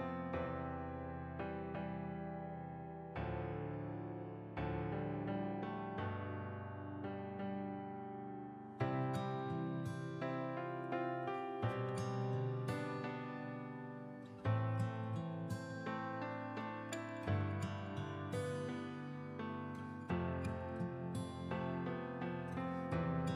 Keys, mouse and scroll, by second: 0.7 click, 8.7 ctrl+j, 10.0 click.